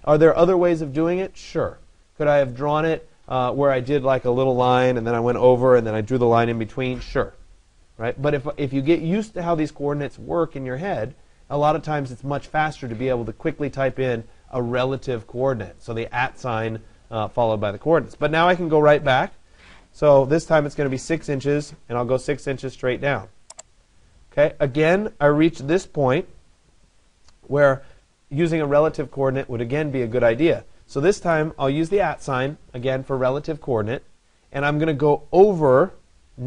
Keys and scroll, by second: 21.0 Return.